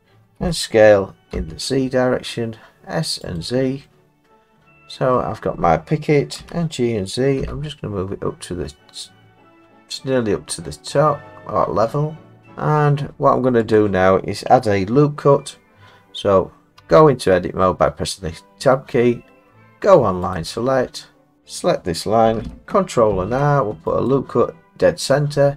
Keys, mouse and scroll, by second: 0.4 s, 1.3 z, 3.4 click, 3.8 middle click, 5.1 middle click, 6.4 g, 7.4 z, 8.8 scroll, 12.4 click, 12.8-13.7 scroll, 13.8 click, 16.8 Tab, 20.4 click, 21.4 click, 23.1 ctrl+r, 24.1 click.